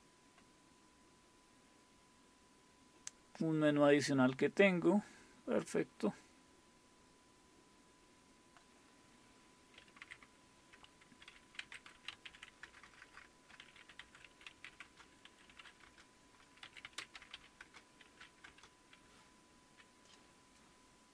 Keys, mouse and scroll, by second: 0.7-4.1 scroll down 1, 4.1-5.2 scroll down 1, 5.2 typing, 10.0 ctrl+x, 11.4-19.2 typing.